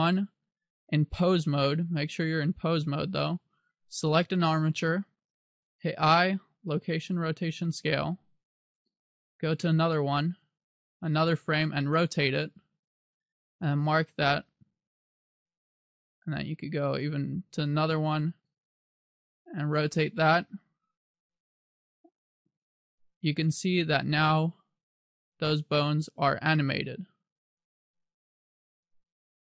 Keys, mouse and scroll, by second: 2.4 click, 4.7 right click, 6.0 i, 8.8 click, 11.3 r, 13.3 click, 13.8 i, 16.0 click, 18.6 right click, 19.1 r, 20.6 click, 22.3 i, 23.9 click.